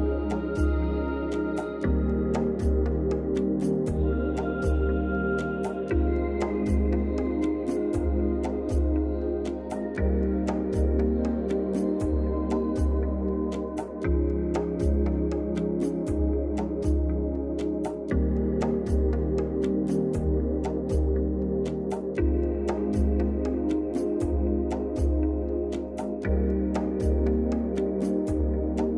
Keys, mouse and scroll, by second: 2.0-2.6 click, 3.0 Down, 3.6 click, 9.2 ctrl+alt+shift+e, 12.7 click, 16.4 click, 16.5 click, 19.7 click, 22.1-23.9 drag.